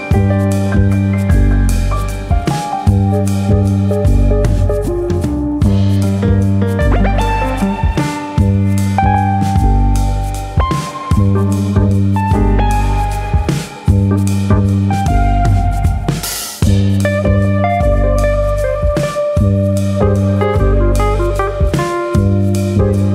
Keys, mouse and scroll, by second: 0.7 shift+middle click, 1.0 scroll up 1, 2.1 click, 2.1 scroll up 1, 3.7 click, 4.8 middle click, 5.8 click, 6.7 scroll up 2, 7.0 middle click, 7.6 click, 9.2 click, 13.3 click, 13.9-14.3 scroll down 3, 14.3 middle click, 15.5-16.0 scroll down 2, 15.8 shift+middle click, 16.0 middle click, 16.3 scroll up 3, 16.5 shift+middle click, 17.0 middle click, 17.5-18.0 scroll up 2, 17.8 middle click, 18.0-18.8 scroll down 4, 18.4 middle click, 19.5 middle click, 22.2-23.1 scroll up 3, 22.4 middle click.